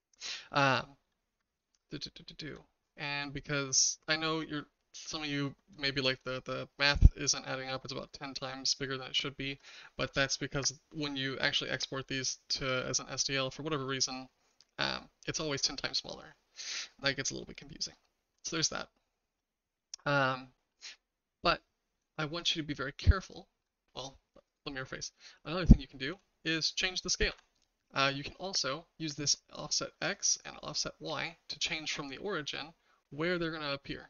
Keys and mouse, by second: 0.3 middle drag, 1.7-2.5 shift+middle drag, 5.8 shift+middle click, 8.9-9.6 shift+middle drag, 12.2-12.7 shift+middle drag, 13.2 middle drag, 17.5-17.9 middle drag, 22.1-23.6 shift+middle drag, 24.5 click, 26.1 s, 30.3-34.0 shift+drag.